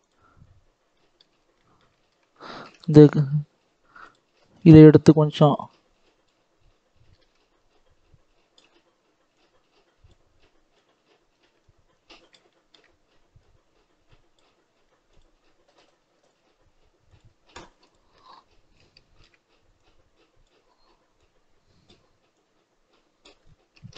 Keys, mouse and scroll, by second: 0.3-0.8 scroll up 2, 0.8 middle click, 1.2 scroll up 2, 1.5-3.5 middle drag, 3.5 click, 4.3-5.6 shift+middle drag, 5.6-7.0 drag, 7.0 ctrl+z, 7.7-12.4 drag, 12.4 shift+middle click, 13.3-23.3 drag, 23.3-23.9 scroll down 2.